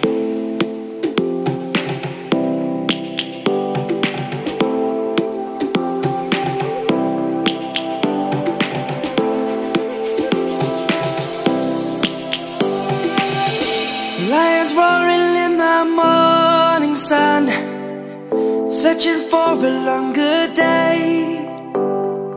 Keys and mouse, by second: 1.1 shift+d, 6.9 shift+d, 15.3 click, 17.1 Tab, 19.6 click, 20.4 click, 21.6 shift+s.